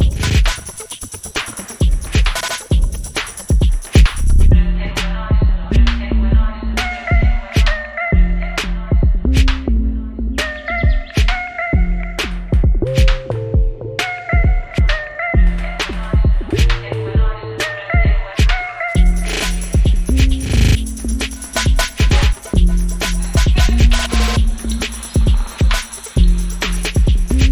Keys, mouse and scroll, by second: 1.5 click, 6.5 click, 7.1 u, 7.8 click, 8.9 right click, 9.3-13.6 drag, 15.8 u, 16.9-18.5 drag, 18.5 right click, 18.8 click, 21.4-27.5 drag.